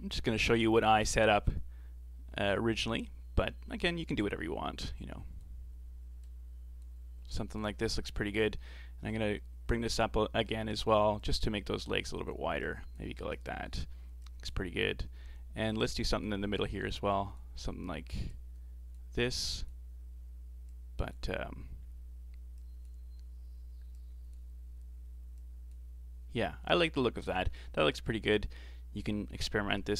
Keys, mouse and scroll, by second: 4.2-7.5 drag, 7.5-9.1 scroll up 3, 9.1-28.4 drag, 29.3-29.9 scroll down 10.